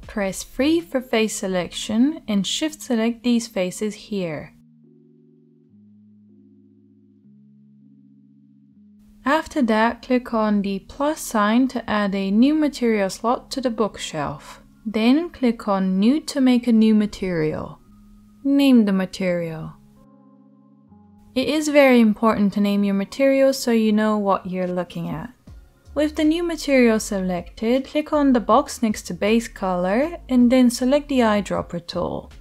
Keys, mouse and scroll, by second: 0.0 3, 1.5 shift+middle click, 1.6-6.1 shift+drag, 6.1 shift+middle click, 6.2 click, 7.1 shift+right click, 7.8 shift+middle click, 8.5-11.8 shift+right drag, 11.8-16.1 middle drag, 16.1 right click, 16.3-28.5 middle drag, 28.5-32.4 drag.